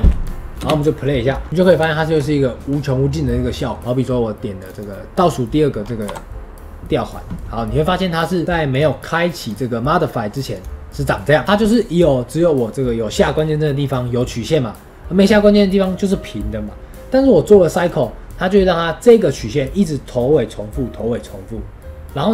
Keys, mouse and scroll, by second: 1.5 click, 1.6 scroll down 1, 1.9-3.8 shift+middle drag, 3.8 click, 6.0 KP_Decimal, 8.4 scroll down 3, 8.6-18.4 drag.